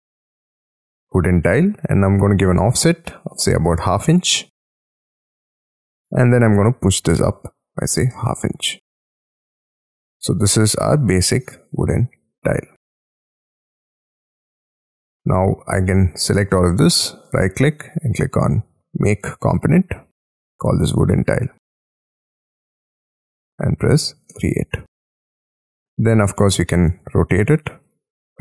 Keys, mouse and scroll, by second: 1.8 f, 3.1-4.7 typing, 5.9 middle click, 6.4 p, 7.6-8.9 typing, 9.2 Return, 10.0 scroll down 1, 10.2 middle click, 13.2 space, 13.4 scroll up 7, 14.7-15.1 scroll down 8, 15.1 scroll up 1, 15.3-15.9 scroll down 1, 15.9 double click, 16.0 double click, 16.1 double click, 16.2-16.7 scroll up 1, 16.7-17.2 scroll down 1, 17.2 middle click, 17.7-20.5 scroll up 1, 20.5-23.6 typing, 24.3 Return, 25.1-25.5 scroll down 3, 25.5 middle click, 26.1-26.8 scroll up 5, 26.1 q, 26.8 right click, 27.8 double click.